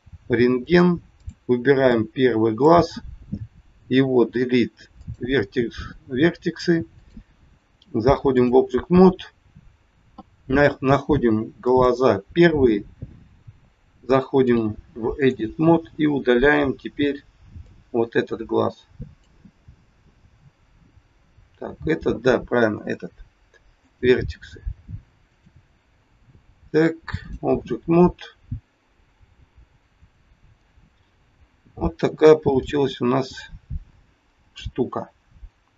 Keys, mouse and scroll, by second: 0.6 click, 1.1 click, 1.8 click, 3.8 Delete, 6.9 click, 11.6 click, 14.5 click, 17.6 click, 22.7 Delete, 25.3 click, 30.0 click, 30.5 middle click, 32.6 middle click, 35.0 scroll up 1.